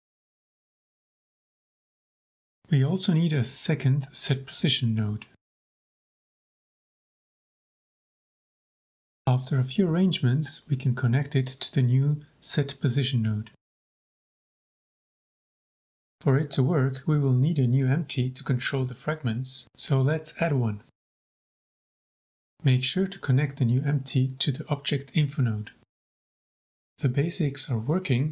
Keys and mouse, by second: 1.1 middle click, 1.8 middle click, 2.7 shift+d, 3.0 click, 3.6 click, 4.5 middle click, 4.8 middle click, 5.1 middle click, 6.0 click, 8.1 x, 9.0-9.6 drag, 9.9-12.2 drag, 12.5-13.6 drag, 13.8 middle click, 14.2 middle click, 15.6 shift+click, 16.1 g, 17.6 ctrl+s, 19.0 shift+a, 21.4-21.7 shift+drag, 22.7 click, 23.1 click, 24.4 click, 25.7 click, 26.5 shift+click, 27.1 g, 27.4 z.